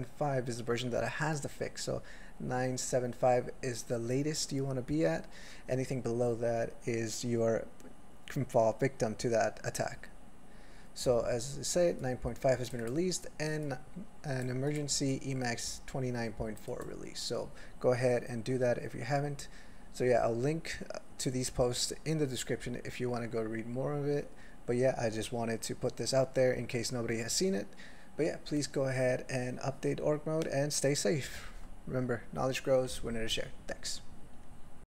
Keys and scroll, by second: 32.0 ctrl+g, 32.6 ctrl+g.